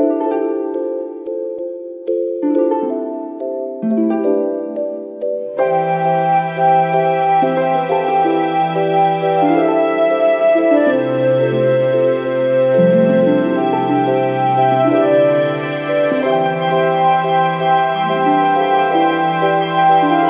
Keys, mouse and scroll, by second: 1.0 click, 3.7 click, 5.3 click, 8.3 click, 11.8-12.5 scroll down 1, 13.0 click, 14.4-14.8 scroll up 2, 15.2 click, 16.8 click.